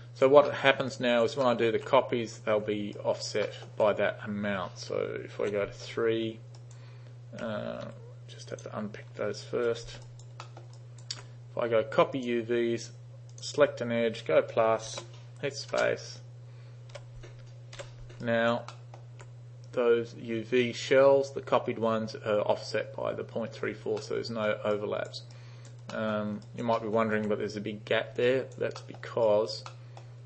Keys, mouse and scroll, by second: 0.6 alt+middle drag, 1.0 alt+right click, 1.5 alt+middle click, 3.0 alt+right click, 3.5 alt+middle click, 5.5 3, 6.6 alt+right click, 7.9 alt+u, 8.6 click, 9.6 3, 10.1 alt+right click, 10.5 alt+middle drag, 10.8 alt+right click, 12.2 click, 13.4 click, 15.8 space, 17.8 u, 18.3 alt+right click, 18.8 alt+middle drag, 24.0-24.5 alt+middle drag, 24.8 alt+right click, 25.4 alt+right click, 26.0 alt+middle click, 26.5 alt+right click, 26.8 alt+middle drag, 28.3 alt+right click, 28.8 alt+middle drag, 29.3 alt+right click, 29.7-30.0 alt+middle drag.